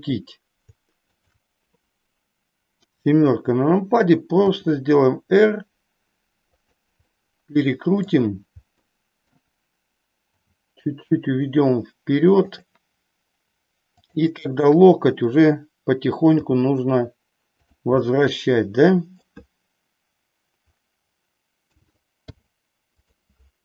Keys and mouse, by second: 1.2 shift+click, 2.8 KP_7, 4.5 r, 6.6 click, 7.0-8.0 middle drag, 8.6 middle click, 10.4 g, 12.5 click, 13.9-15.2 drag, 16.3 g, 17.6 click, 18.0-19.3 middle drag, 21.6 a, 22.2 i.